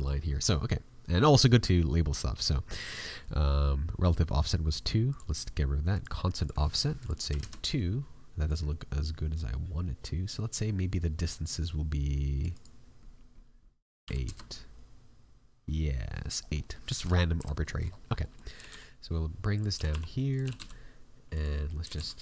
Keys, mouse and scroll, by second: 2.6 click, 12.5 click, 15.9 middle click, 16.4 scroll up 3, 16.6 middle click, 17.3 KP_Decimal, 17.5 scroll up 1, 17.7 middle click, 17.8-18.3 scroll down 7, 18.2 middle click, 18.5 g, 20.5 g, 21.5 middle click, 21.8 g.